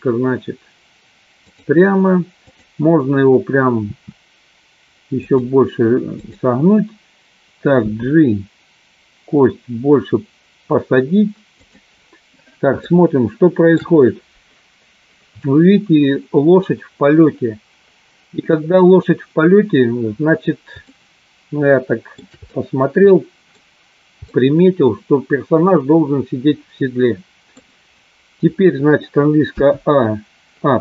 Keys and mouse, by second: 2.5 click, 3.9 r, 6.3 click, 8.2 g, 11.9 click, 12.9 shift+middle click, 20.9-22.2 shift+middle drag, 22.4-23.6 middle drag, 24.3-27.6 middle drag.